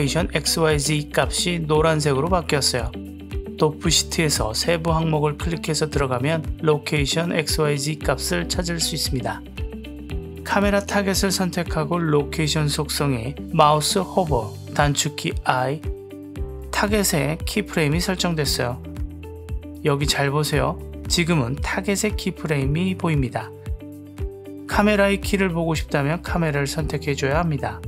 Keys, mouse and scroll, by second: 6.0 click, 15.1 i, 17.1 click, 18.1 click.